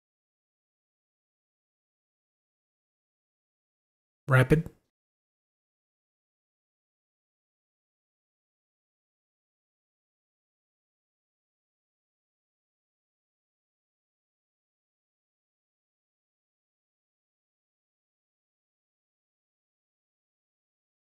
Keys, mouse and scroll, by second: 4.0 Tab.